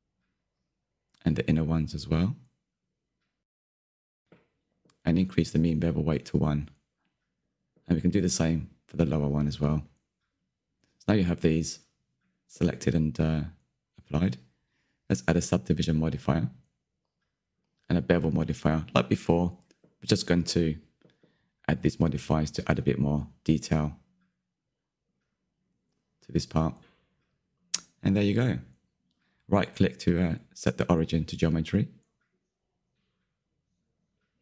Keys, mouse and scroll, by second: 0.7 shift+click, 1.2-3.5 middle drag, 3.5 shift+click, 3.8-4.8 middle drag, 4.8 shift+click, 5.9-7.6 drag, 7.6-9.1 middle drag, 9.1 alt+click, 10.2 click, 11.3-14.6 middle drag, 14.6 Tab, 15.3-15.9 right drag, 15.9-16.9 drag, 16.9-18.0 middle drag, 18.0 click, 19.0-19.9 drag, 19.9 middle drag, 20.1 scroll down 1, 20.2 shift+middle drag, 20.4-20.9 scroll up 2, 20.9 click, 21.0-21.5 middle drag, 21.5 click, 22.4 middle click, 23.0 click, 23.4 scroll up 1, 23.5 shift+middle click, 23.9 shift+click, 25.4 middle click, 25.8 Tab, 26.3 Tab, 27.0 middle click, 27.3-27.8 drag, 27.8 q, 28.0 scroll down 11, 28.3 middle click, 28.8 click, 29.6-32.7 middle drag, 32.7-33.3 right drag, 33.3-34.4 middle drag.